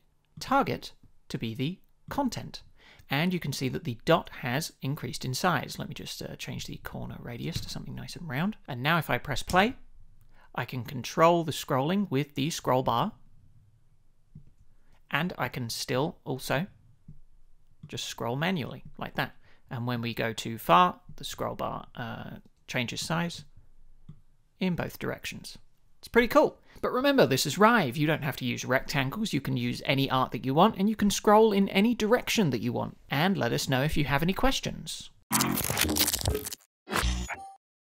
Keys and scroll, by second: 6.7 shift+Up, 7.5 Return, 9.4 space.